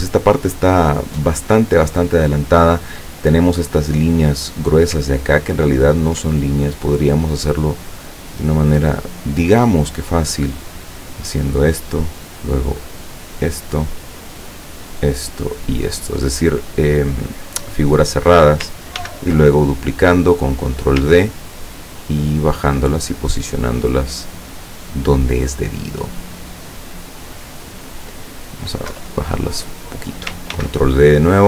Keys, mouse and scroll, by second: 5.3-5.8 ctrl+scroll up 2, 5.8-6.7 ctrl+scroll down 1, 9.4 click, 11.4 click, 13.4 click, 14.9 click, 16.0 click, 17.7 click, 19.0 ctrl+d, 20.0 click, 20.7 click, 21.5-24.9 ctrl+drag, 25.5-27.9 drag, 29.0 Down, 30.5 ctrl+d.